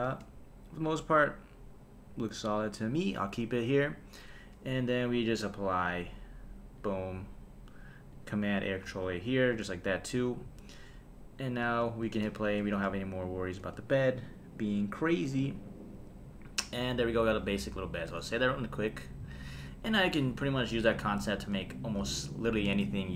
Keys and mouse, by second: 0.1 space, 5.8-6.9 drag, 8.1 click, 8.9 super+a, 10.2 click, 11.6 space, 12.0 space, 12.4 shift+Left, 12.7 space, 13.2 click, 13.6 space, 14.2 click, 17.0 click, 18.1 super+s.